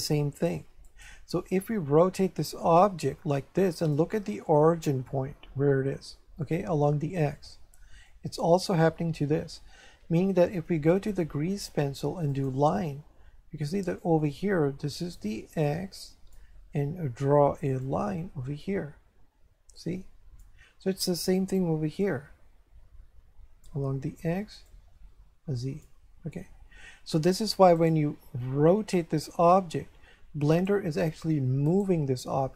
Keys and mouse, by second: 0.8 right click, 1.8 r, 3.8 click, 8.1 shift+middle click, 12.3 click, 14.0 click, 17.8 click, 22.0 click, 24.6 click, 26.8 Escape, 27.7 right click, 28.8 r, 30.5 right click, 31.7 right click.